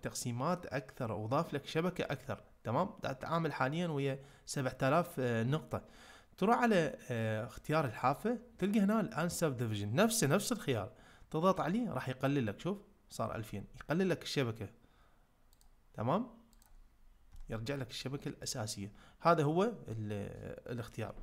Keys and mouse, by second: 7.9-11.6 drag, 15.6-16.6 drag, 17.3-18.4 middle drag.